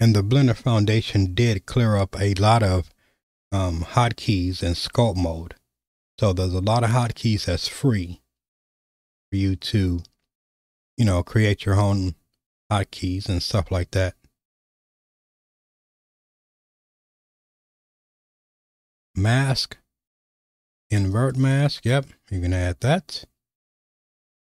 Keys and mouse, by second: 15.5 right click, 18.7-24.5 drag.